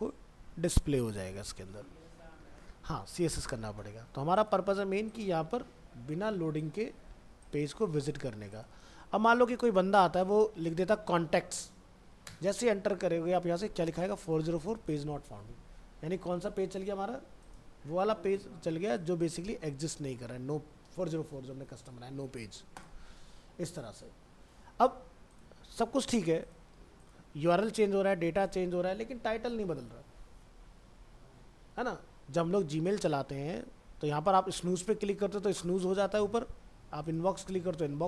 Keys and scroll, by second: 0.5 alt+Tab.